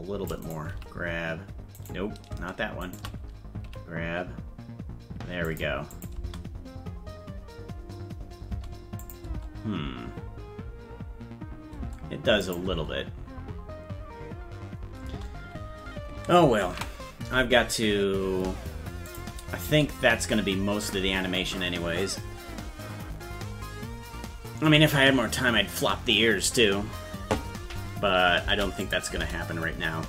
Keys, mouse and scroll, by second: 0.7 g, 2.8 shift+right click, 3.6 g, 5.9 click, 6.1 space, 9.0 click, 9.0 space, 9.3 space, 12.4 click, 12.7 space, 16.8 ctrl+s, 19.1 click, 19.6 space, 28.8 click, 28.8 space, 29.1 space.